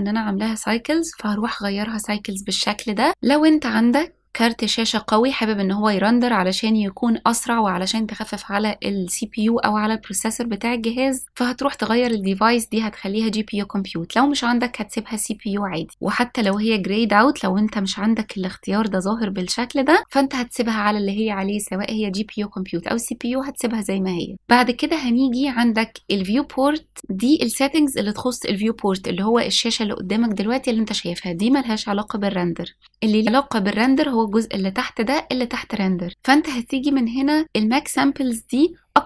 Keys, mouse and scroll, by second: 12.0-15.7 drag, 16.4-24.3 drag.